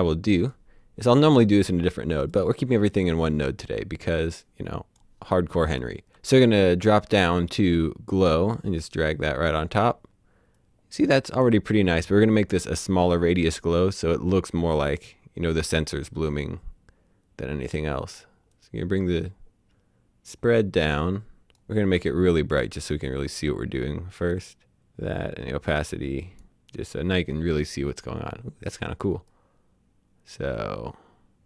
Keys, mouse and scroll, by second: 0.5 click, 2.3 click, 4.3 click, 6.1-8.1 scroll down 1, 8.6 click, 18.6 click, 26.2 click, 29.4 click.